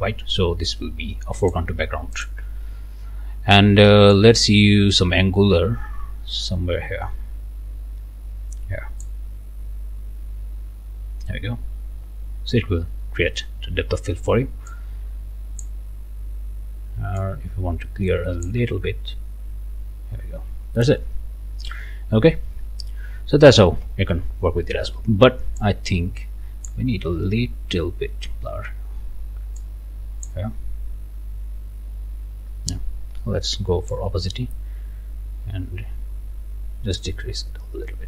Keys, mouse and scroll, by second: 1.4 click, 2.2 click, 4.1-9.2 drag, 14.7-15.8 drag, 17.2-18.7 drag, 21.3 scroll down 1, 21.7 scroll up 1, 23.0 scroll down 1, 23.4 right click, 25.6-26.9 drag, 29.6 click, 33.9-37.2 drag.